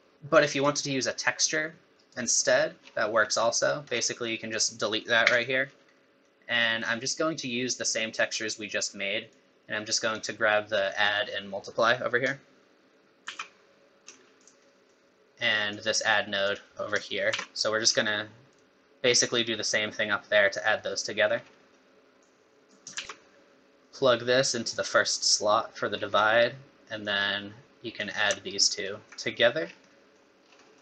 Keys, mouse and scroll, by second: 0.6 click, 2.8-3.3 scroll down 10, 3.5 middle click, 3.8 scroll up 4, 4.5 click, 5.2 x, 5.6 scroll down 2, 5.9 middle click, 6.6 middle click, 8.7 middle click, 9.3 click, 11.3 middle click, 13.2 shift+d, 14.7 middle click, 15.7 click, 16.5 click, 17.3 shift+d, 20.8 middle click, 21.3 scroll down 3, 21.6 middle click, 22.2 click, 23.0 shift+d, 23.8 middle click, 23.8 click, 23.8 scroll down 1, 25.9 scroll down 4, 26.2 middle click, 27.0 click, 28.5 alt+right click, 29.6 scroll down 5, 29.9 middle click, 30.4 scroll down 2, 30.6 middle click.